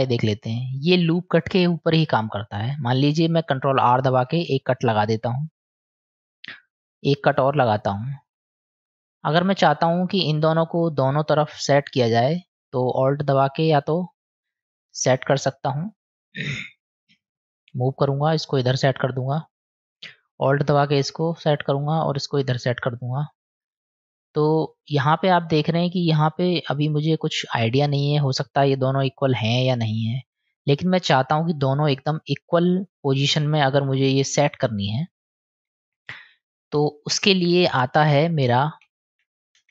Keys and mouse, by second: 4.5 ctrl+r, 7.4 click, 9.0 click, 13.3 alt+click, 18.4-19.6 drag, 20.8 alt+click, 22.2-23.6 drag, 25.8-26.8 middle drag, 29.8-30.9 middle drag, 32.2 click, 32.9 click, 34.0 middle click, 34.8 click, 35.9 ctrl+z, 36.3 ctrl+z, 37.2 ctrl+z, 37.6 ctrl+z, 38.4 ctrl+z, 38.9 ctrl+z, 39.6 ctrl+z.